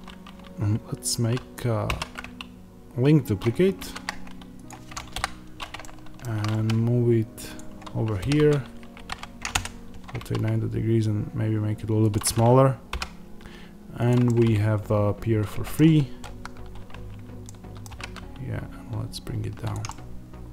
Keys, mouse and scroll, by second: 1.8 alt+d, 4.6 click, 6.4 g, 7.4 click, 8.1 r, 10.1 s, 12.0 click, 12.8 g, 14.0 click, 14.1-16.1 middle drag, 17.3 middle click, 17.8 g, 19.6 click, 19.8-20.5 middle drag.